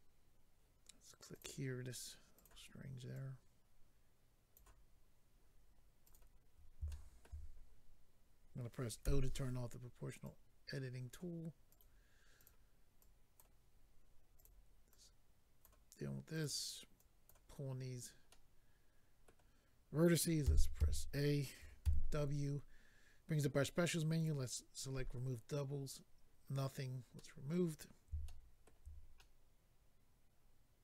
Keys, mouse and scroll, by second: 1.3 click, 1.4 click, 2.3 click, 2.4 click, 3.1 click, 6.0 click, 6.1 click, 6.9 shift+middle click, 7.4-8.5 scroll up 2, 10.2 click, 11.7 click, 11.8 click, 12.4 click, 12.5 click, 13.0 click, 14.4 click, 14.4 click, 14.9 click, 16.3 click, 16.4 click, 16.9 click, 17.8-18.4 scroll down 2, 18.3 middle click, 20.4 middle click, 20.8 typing, 21.8 w, 24.1 click, 26.7-27.1 scroll down 1, 27.1 middle click, 28.2 shift+middle click, 28.6 middle click, 29.2 middle click.